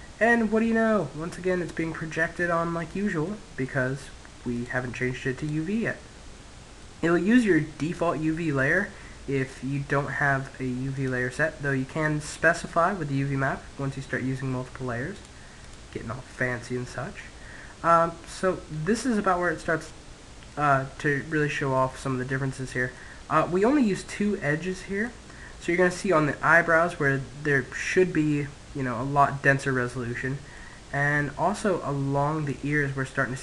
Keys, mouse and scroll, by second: 3.6 click, 5.3-7.1 middle drag, 9.9 click, 14.6 click, 16.4-18.2 middle drag, 19.8-23.0 middle drag, 23.2-25.0 middle drag, 25.1 middle click, 25.8-27.4 middle drag, 28.8-32.1 middle drag, 32.1-33.3 scroll down 1, 33.3-33.4 scroll down 1.